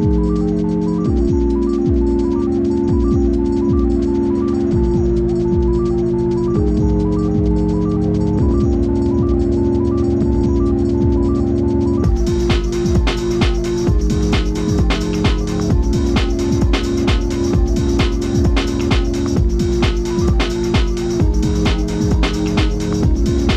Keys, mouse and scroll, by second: 0.3 click, 0.3 z, 1.0 click, 2.7 BackSpace, 2.8 z, 3.7 click, 4.7 alt+shift+click, 8.8-19.8 drag, 21.5-23.5 alt+shift+drag.